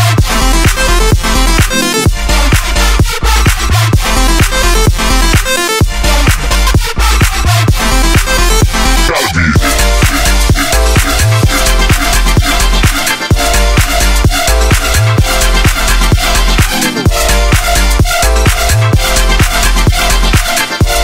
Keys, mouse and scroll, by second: 9.9 super+z, 12.5 super+z.